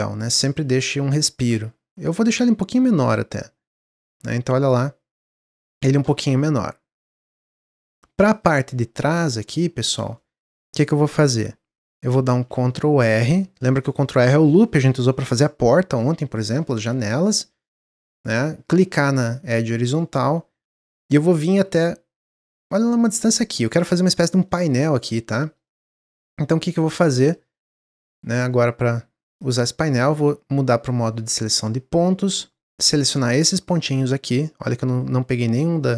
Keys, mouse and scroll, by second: 6.3-8.3 middle drag, 8.3 click, 8.9-9.8 middle drag, 9.8 click, 10.1-12.3 middle drag, 12.3 ctrl+r, 24.4-28.6 middle drag, 29.3 click, 29.7-30.8 middle drag, 30.8 click, 31.9 click, 33.1 middle click, 33.5-33.9 scroll up 3, 33.9-35.9 middle drag.